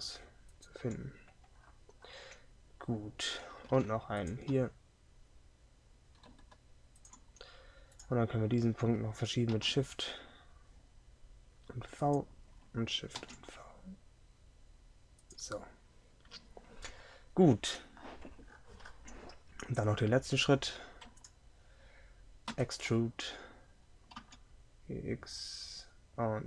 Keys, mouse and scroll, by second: 3.7 ctrl+r, 9.6 shift+v, 13.2 shift+v, 22.5 e.